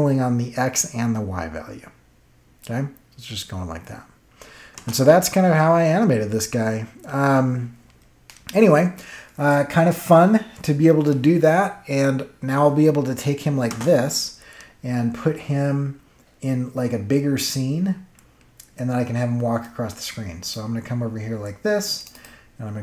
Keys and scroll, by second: 4.7 space, 13.6 space.